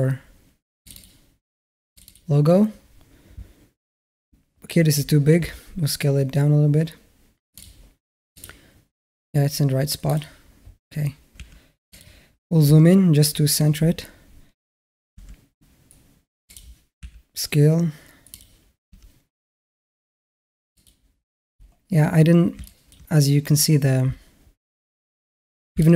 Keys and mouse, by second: 5.2 s, 8.1 click, 9.9 click, 11.2 s, 14.9 g, 16.8 s, 18.7 g, 22.5 middle drag, 25.6 alt+middle click.